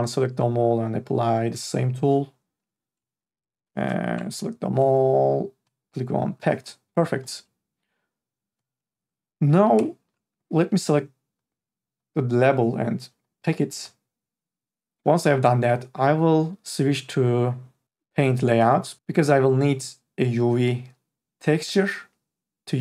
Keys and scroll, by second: 0.0 ctrl+a, 4.1 ctrl+a, 9.6 3, 9.8 e.